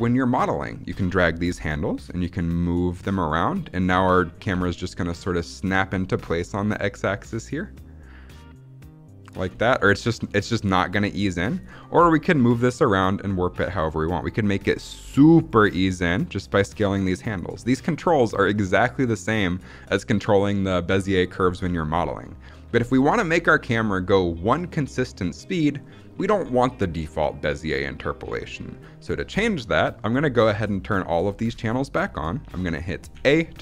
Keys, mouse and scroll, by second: 0.9 click, 1.3 g, 3.2 drag, 3.8 drag, 4.4 space, 9.4 space, 9.9-11.5 drag, 11.8 g, 12.8 click, 13.5 click, 14.0 click, 14.7 click, 14.9 s, 15.3 click, 15.9 click, 16.6 middle click, 17.1 click, 17.4 g, 18.8 drag, 21.2 scroll down 2, 21.5 middle click, 24.4 scroll up 2, 30.5-30.9 drag, 33.0 a.